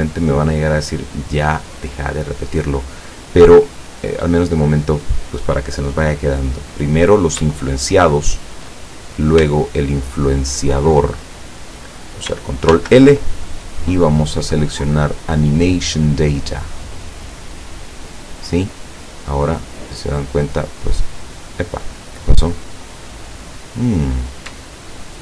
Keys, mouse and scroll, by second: 8.0 shift+right click, 10.3 shift+right click, 12.7 ctrl+l, 17.8 click, 19.5 right click, 21.7 right click, 22.8 right click, 23.5 right click, 24.7 shift+right click.